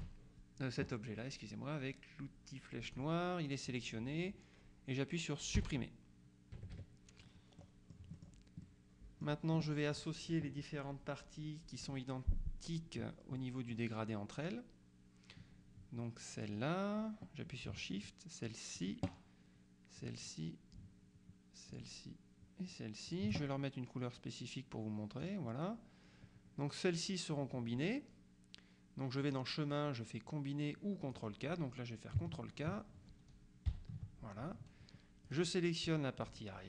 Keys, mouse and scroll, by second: 0.1 Delete, 2.9 click, 5.7 Delete, 6.6 KP_Subtract, 7.7-8.1 scroll up 2, 8.1 scroll down 1, 8.2 middle click, 11.8 click, 13.5 middle click, 16.5 click, 18.9 shift+click, 20.1 click, 21.8 click, 23.2 click, 25.3 click, 29.3 click, 31.2 click, 33.8 ctrl+k, 35.3 click, 36.3 shift+click.